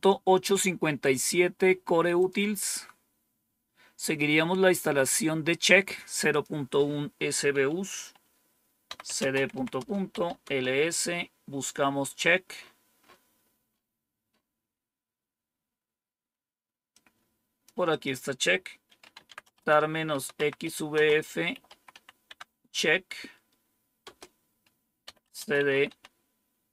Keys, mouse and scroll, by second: 2.1 click, 6.2 click, 8.6-10.5 typing, 12.1 scroll up 1, 14.6-15.4 scroll down 1, 16.6-17.3 typing, 16.8 click, 17.8 click, 18.7-22.2 typing, 24.0-26.7 typing.